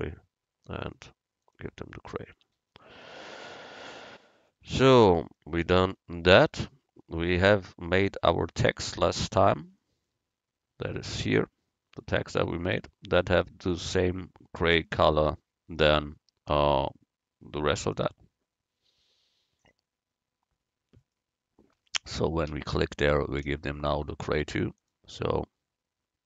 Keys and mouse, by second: 1.4-3.3 drag, 2.4 Tab, 3.5 a, 14.8-23.2 right drag, 24.8-26.2 drag, 24.8 right click.